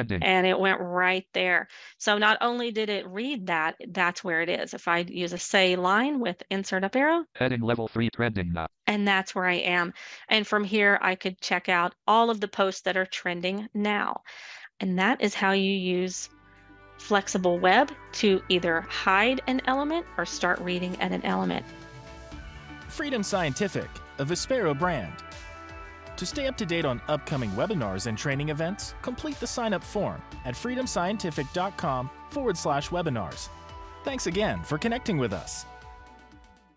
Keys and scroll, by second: 5.7 Insert, 5.7 Up.